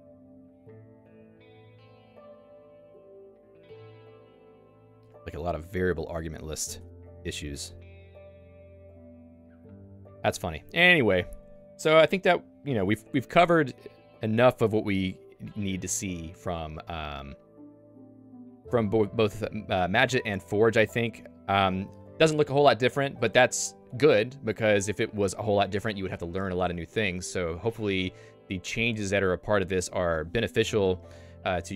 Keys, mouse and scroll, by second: 6.8 ctrl+d, 6.9 ctrl+d, 14.7 click.